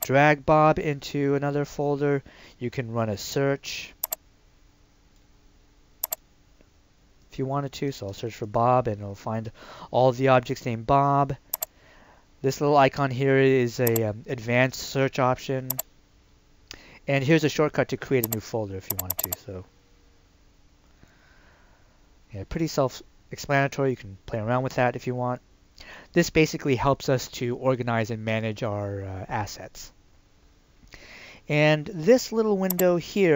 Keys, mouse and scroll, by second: 4.0 click, 7.8 typing, 8.5 Return, 11.5 click, 32.7 click.